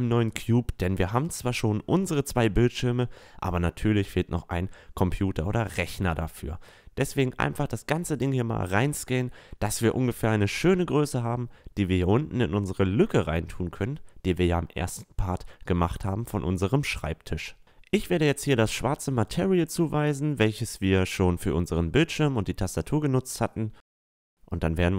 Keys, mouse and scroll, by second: 0.5-2.6 middle drag, 5.4 s, 7.2-8.9 drag, 9.0 s, 11.0 s, 15.0 s, 17.6-20.6 drag, 20.9-22.8 drag, 22.8-23.8 middle drag, 23.8-24.9 drag.